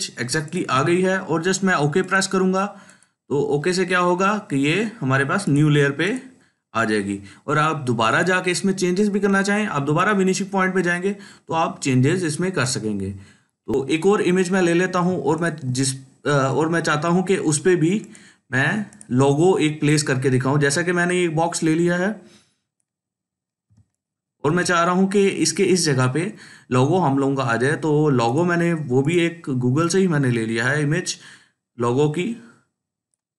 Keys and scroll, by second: 0.2 ctrl+space, 13.7 ctrl+z, 23.6 ctrl+space, 24.1 ctrl+space.